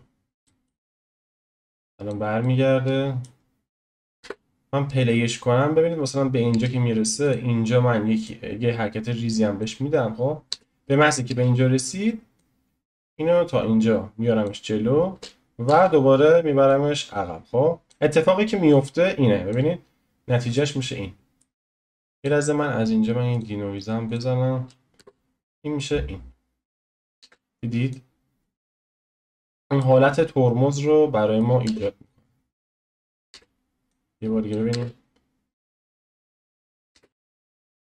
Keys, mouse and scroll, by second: 0.4 shift+middle click, 1.3-2.4 drag, 2.4-3.4 middle drag, 3.4-4.0 scroll down 1, 4.0 shift+middle click, 4.2 space, 6.5 space, 7.3 click, 8.4 click, 10.5 space, 11.3 space, 12.4 click, 15.1 space, 15.7 space, 16.7 click, 18.7-24.9 drag, 19.9-20.5 scroll up 1, 20.5-24.1 shift+middle drag, 24.9 space, 27.2 space, 27.9-29.1 drag, 29.1-31.6 middle drag, 31.6 space, 33.3 space, 33.9 click, 34.7 space, 36.9 space, 37.1 click, 37.1-37.6 scroll up 1, 37.6-37.8 shift+middle drag.